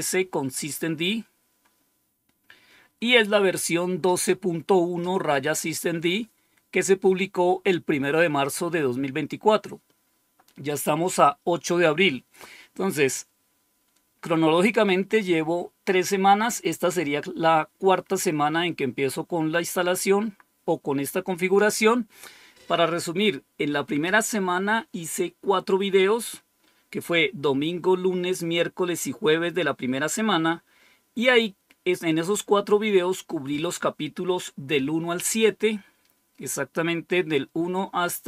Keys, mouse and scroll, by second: 0.4 click, 35.9-38.2 scroll down 8.